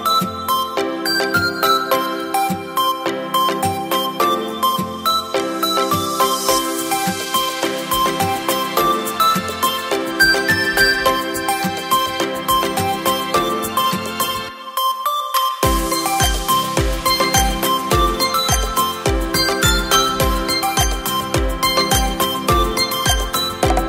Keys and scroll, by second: 17.2 space, 20.3 Return, 21.8 ctrl+t.